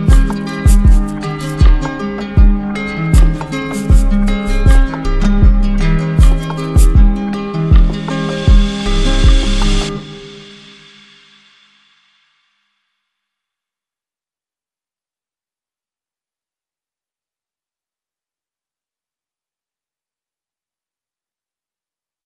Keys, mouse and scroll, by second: 0.1 click, 1.7 click, 2.8 click, 6.1 click, 16.2 click, 17.2 click, 21.3 click, 21.6 ctrl+s.